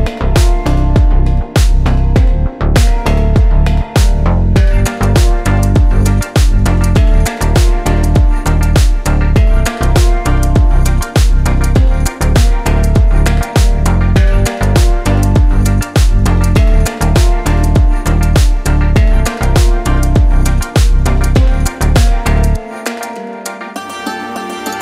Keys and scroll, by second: 0.3 s, 3.3 e, 5.7 s, 8.6 e, 12.9 s, 17.7 Delete, 20.5 KP_1.